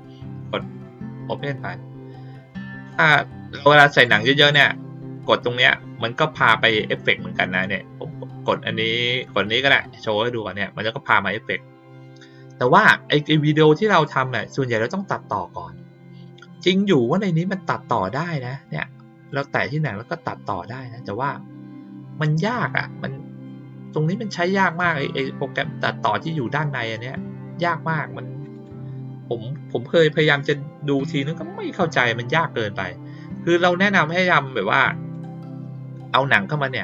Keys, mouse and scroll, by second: 0.7 click, 4.0-4.5 drag, 9.1 click, 19.2 click, 24.7 click, 28.5 click, 35.1 click.